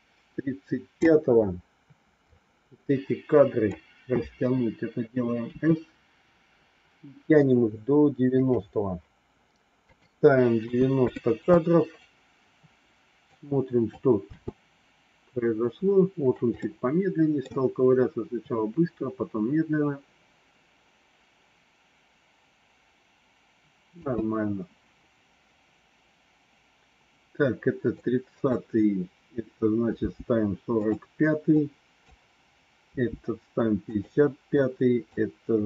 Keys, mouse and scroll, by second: 2.2-3.7 drag, 5.4 s, 9.8-11.5 drag, 13.3 click, 14.3 space, 16.5 middle click, 23.9 space, 27.9 click, 30.0 g, 31.4 click, 32.8 g, 34.5 click.